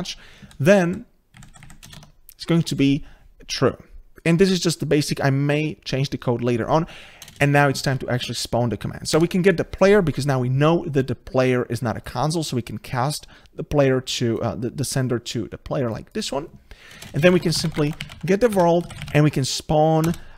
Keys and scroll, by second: 2.0 Tab, 9.2 Tab, 18.5 Return.